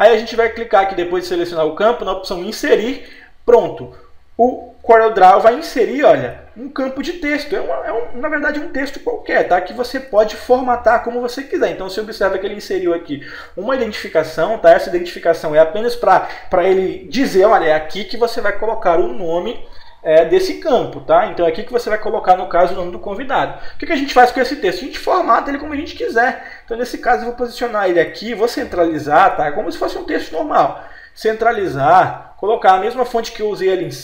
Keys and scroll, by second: 4.8 p, 7.9 F4, 9.3 p, 10.0 p.